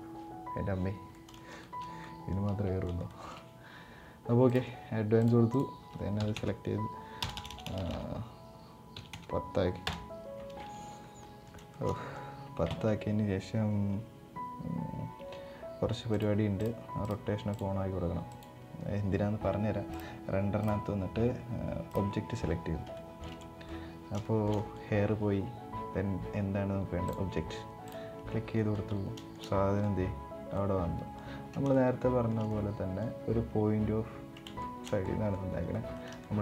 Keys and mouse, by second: 0.9 middle click, 1.4 shift+middle drag, 1.8 middle drag, 2.6 middle click, 2.9 shift+middle click, 4.2 click, 5.0-10.1 drag, 7.1 BackSpace, 7.8 BackSpace, 10.9 middle click, 11.4 shift+middle click, 11.6 middle click, 15.8 click, 16.3 click, 17.2 click, 18.0 click, 20.3-21.6 drag, 22.7 shift+middle click, 23.1 middle drag, 23.9 shift+middle drag, 24.3 middle click, 26.8 click, 28.3 middle click, 28.9 shift+middle drag, 30.3-30.9 middle drag, 31.5-32.0 shift+middle drag, 32.3 middle click, 34.4 shift+middle drag, 34.8-35.1 middle drag, 35.5 middle click, 35.9 shift+middle click.